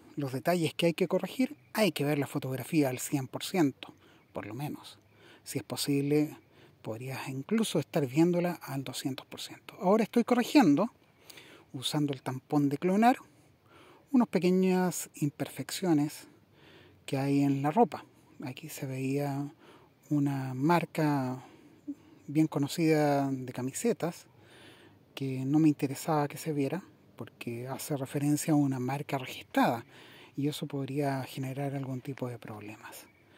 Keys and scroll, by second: 23.1 super++.